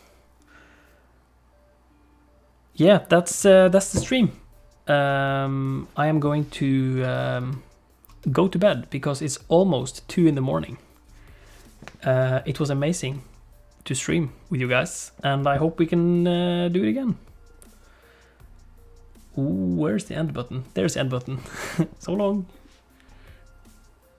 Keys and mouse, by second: 7.5 middle click.